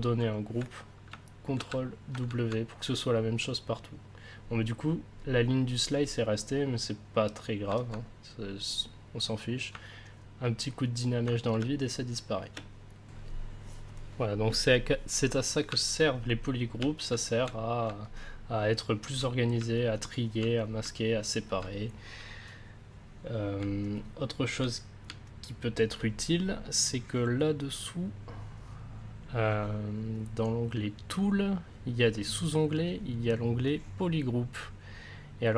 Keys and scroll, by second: 1.5 ctrl+w, 11.5 space, 12.9 space.